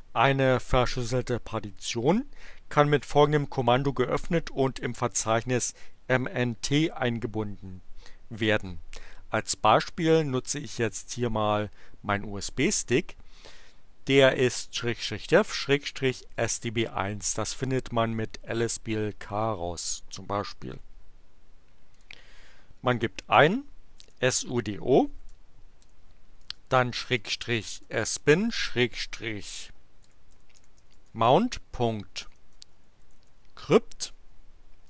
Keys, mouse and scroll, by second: 21.8 click, 23.7-28.6 typing, 30.1-33.6 typing.